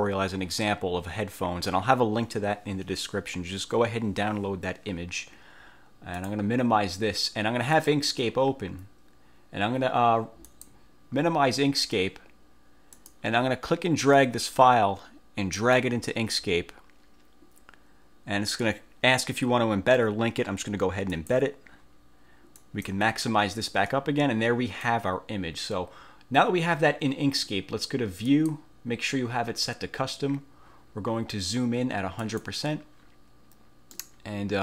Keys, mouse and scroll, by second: 6.3 click, 7.9 click, 10.6 click, 13.1 click, 14.3-15.9 drag, 21.3 click, 22.7 click, 24.0-25.1 drag, 28.4 click, 32.3 click, 34.1-34.6 middle drag.